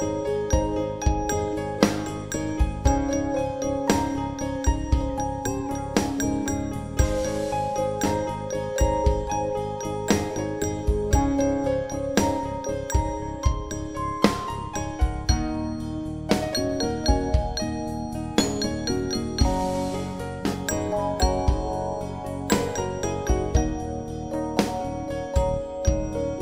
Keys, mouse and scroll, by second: 0.0-1.1 typing, 4.9 click, 10.9 m, 12.3 click, 12.9 BackSpace, 13.6 click, 14.6 s, 15.0 Tab, 15.4 m, 15.6 Tab, 17.8 BackSpace, 18.4 Tab, 18.8 click, 19.5 m, 19.7 Tab, 20.4 l, 20.5 Tab, 21.4-21.7 typing, 23.9 click, 25.7-26.4 typing.